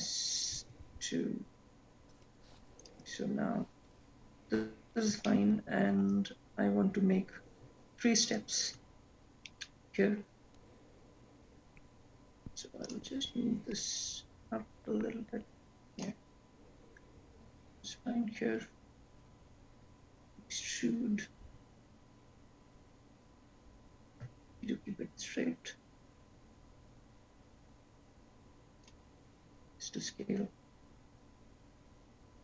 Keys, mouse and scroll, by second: 0.5 s, 7.7-10.8 scroll down 2, 10.8 shift+middle click, 10.8-11.8 scroll up 5, 11.8-13.5 scroll down 1, 14.1 shift+middle click, 14.1-15.2 scroll up 1, 15.2 click, 15.4 click, 20.7 e, 31.3 s.